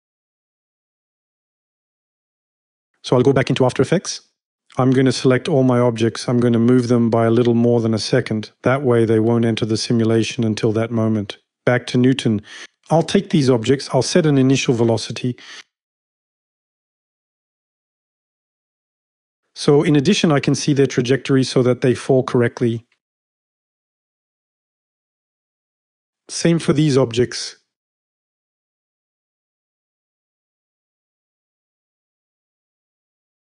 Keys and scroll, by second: 10.2 F5, 25.6 v.